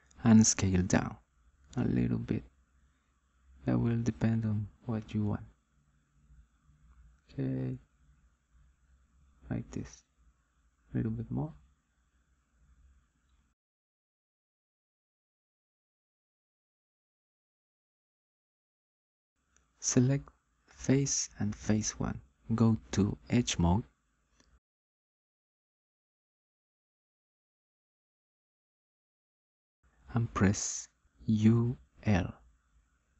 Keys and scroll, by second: 31.0 u, 32.0 l.